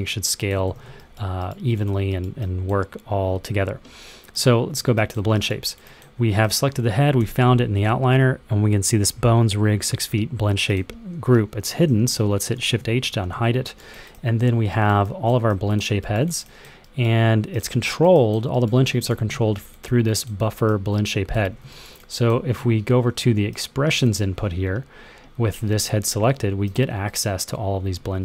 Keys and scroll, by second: 0.5 super+z, 7.1 f, 12.4 shift+h, 19.0 w, 21.2 super+z.